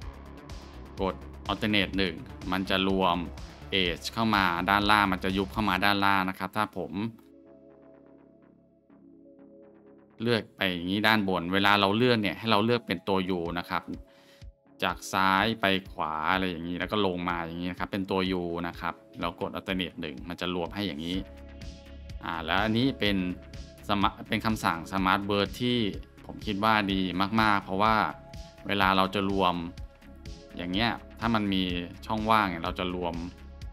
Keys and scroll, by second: 1.9 alt+shift+1, 6.2 ctrl+z, 9.9 alt+1, 11.8 ctrl+z, 19.7 alt+shift+1, 20.9 ctrl+z, 21.9 Tab, 26.7 Tab, 32.4 shift+1, 33.4 ctrl+z.